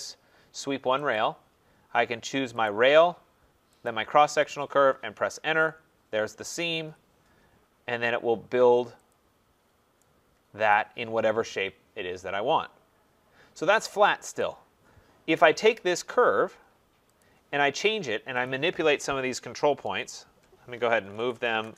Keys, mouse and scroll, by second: 1.1 click, 2.6 click, 5.0 Return, 6.7 Return, 9.1 click, 9.5 middle click, 9.6-10.0 scroll down 3, 10.7 right click, 11.0-11.9 scroll down 4, 12.6 scroll up 3, 12.8 middle click, 12.8 middle click, 14.4 click, 15.2 Delete, 17.2 click, 18.4 click, 20.1 shift+click, 20.7-21.7 typing.